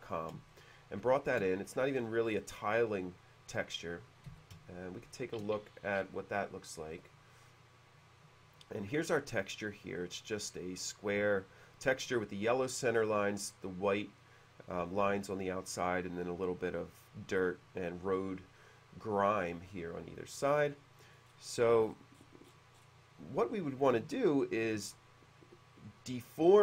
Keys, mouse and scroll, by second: 0.6 shift+middle click, 2.0-2.7 scroll up 4, 4.4 b, 5.2 shift+click, 6.1-7.2 drag, 7.6 typing, 20.3 click, 21.3 middle click, 21.4-22.0 scroll down 1, 22.6-23.2 scroll down 2, 24.3 shift+middle click.